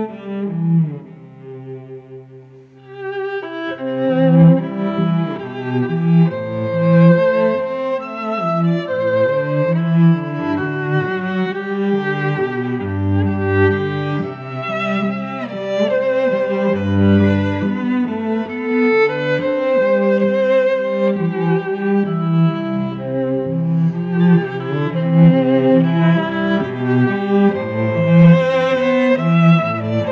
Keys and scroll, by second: 0.7 Left, 1.2 Return, 1.5 v, 2.8 shift+Left, 3.3 shift+Down, 3.6 shift+Left, 4.0 shift+Down, 4.3 shift+Left, 5.4 a, 6.4 shift+Right, 7.2 shift+Up, 8.6 shift+Right, 9.3 Right, 10.6 Left, 11.9 space, 17.2 Return, 17.5 v, 19.2 v, 21.6 v, 29.8 Return.